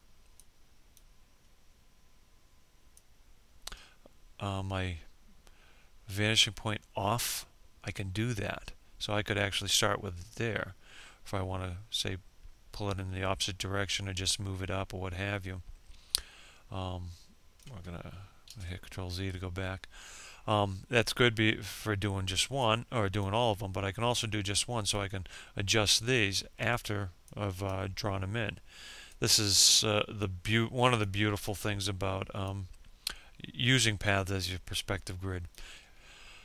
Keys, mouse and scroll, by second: 1.9-16.5 ctrl+drag, 17.3 ctrl+z, 21.5 ctrl+click, 23.1 ctrl+click, 26.1 ctrl+click, 27.9 ctrl+click, 29.8 ctrl+click, 31.3-34.3 ctrl+drag.